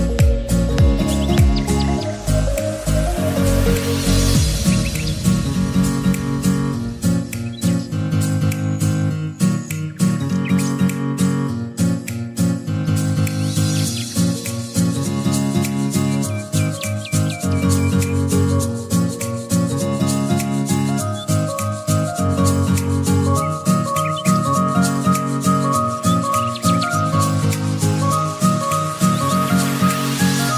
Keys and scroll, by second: 15.0 ctrl+z.